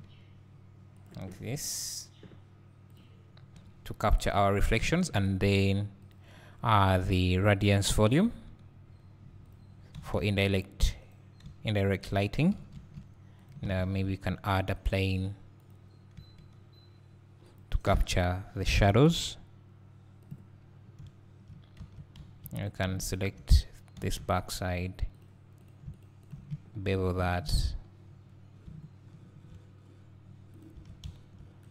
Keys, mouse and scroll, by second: 0.0 g, 1.0 click, 3.6 KP_3, 4.3-7.1 scroll down 1, 8.3 s, 9.5 click, 10.0 s, 11.1 right click, 11.5 s, 12.1 click, 12.5 g, 13.5 click, 16.2 s, 17.6 click, 18.6 g, 20.3 click, 20.8 scroll down 1, 21.5 scroll down 1, 21.8 Tab, 22.2 2, 23.1-25.7 shift+drag, 24.0 e, 26.2 shift+click, 27.2 ctrl+b, 30.6 click, 30.8 Tab.